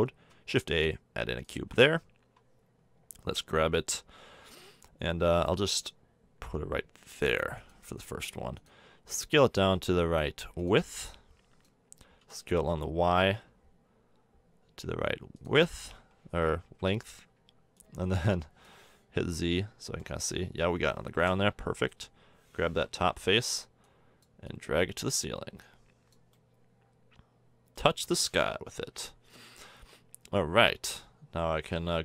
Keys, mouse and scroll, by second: 0.3 shift+a, 4.3 g, 8.0 s, 8.8 s, 11.6-12.5 drag, 12.2 s, 16.6 KP_1, 17.8-19.2 drag, 19.2 z, 21.5 Tab, 23.1 KP_1, 23.9 click, 27.9 KP_7, 28.8 z, 29.7 Tab, 30.8 Tab.